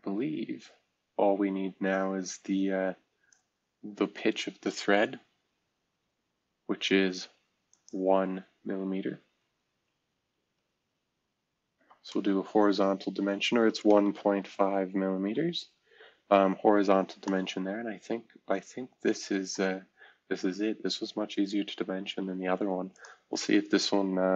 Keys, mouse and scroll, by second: 7.7 click, 11.7 shift+h, 13.6-14.2 typing, 15.2 Return, 16.7 scroll down 1, 17.8 typing, 21.4 typing, 23.0 click, 23.9 click.